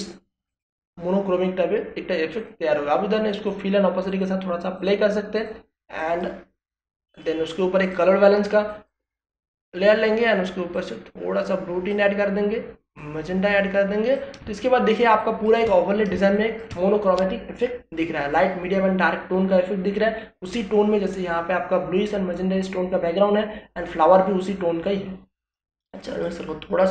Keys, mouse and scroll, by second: 13.7 ctrl+space, 13.9 ctrl+click, 14.2 ctrl+space, 15.6 ctrl+click, 15.9 ctrl+space, 25.4-26.9 drag.